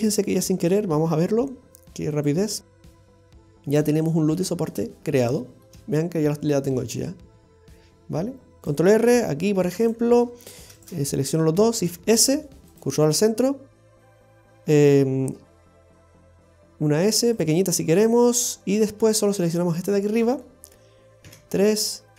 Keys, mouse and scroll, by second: 0.1 Tab, 0.5-1.0 scroll down 4, 1.0 middle click, 2.2 click, 2.6-3.1 scroll up 1, 3.2 Tab, 3.8-4.3 scroll down 2, 4.1 middle click, 4.5-5.1 scroll up 7, 5.3 shift+middle click, 8.6 ctrl+r, 8.6 shift+middle click, 10.2-10.7 scroll up 1, 10.8 alt+shift+right click, 11.8 shift+s, 14.1 middle click, 15.5 shift+s, 16.5 s, 17.8 middle click, 18.5 scroll up 1, 19.6 alt+shift+right click, 19.9 alt+shift+right click, 20.5 middle click, 20.7 scroll up 1, 21.3 KP_3.